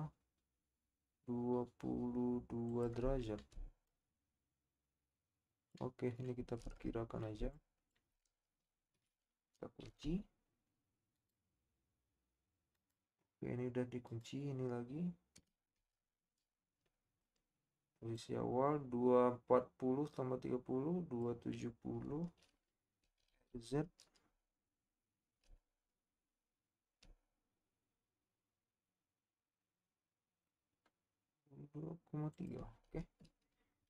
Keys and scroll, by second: 9.8 typing, 15.9 typing, 23.2 r.